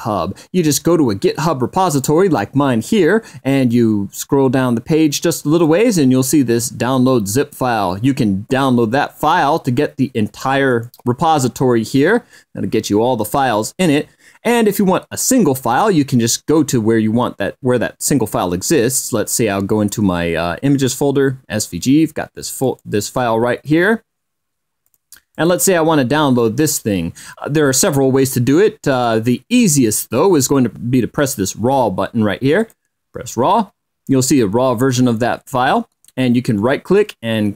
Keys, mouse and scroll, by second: 4.1 click, 8.7 click, 10.7 click, 11.4-11.8 scroll up 1, 13.8-14.4 scroll down 4, 16.9 click, 21.2 click, 23.0 click, 25.2 click, 25.7 click, 26.8-29.7 drag, 33.4 click, 37.3 click.